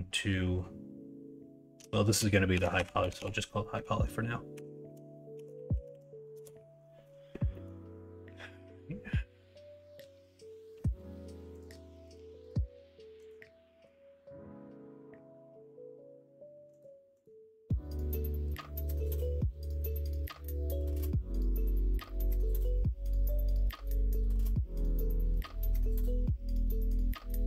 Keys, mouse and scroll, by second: 7.5 middle click, 25.3 ctrl+i, 26.2 h, 26.9 middle drag.